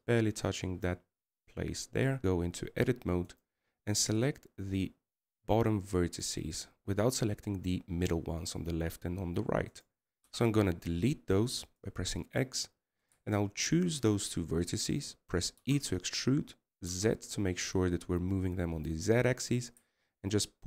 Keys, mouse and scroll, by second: 2.2-3.3 scroll down 2, 3.4 Tab, 5.1 right click, 5.9 c, 12.0 x, 14.8 right click, 15.5 shift+right click, 17.4 e.